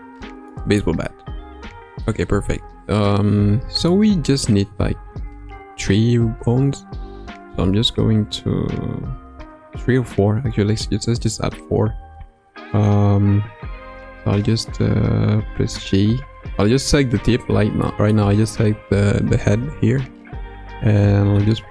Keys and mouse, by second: 0.6 middle click, 1.1 KP_3, 1.6 KP_1, 3.8-4.4 shift+middle drag, 6.8 Tab, 15.6 g, 17.8 middle click, 19.4 KP_1, 21.2 g.